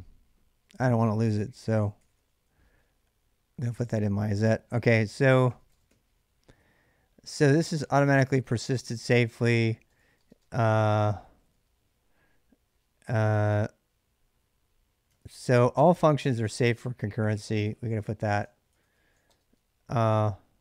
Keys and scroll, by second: 1.3-2.4 typing, 3.5 Return, 4.6-7.5 typing, 9.0-11.4 typing, 14.8-19.0 typing, 20.5-20.6 typing.